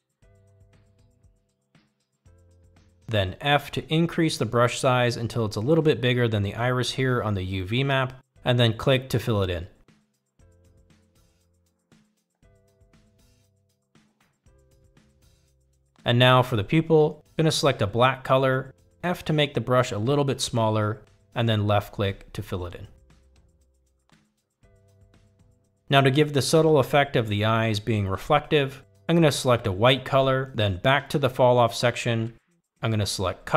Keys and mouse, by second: 4.0 f, 8.8 click, 12.0 click, 15.1 f, 17.0 click, 21.2 f, 22.0 f, 23.5 click, 26.3 click, 28.1 shift+middle click, 28.8 f, 30.9 click.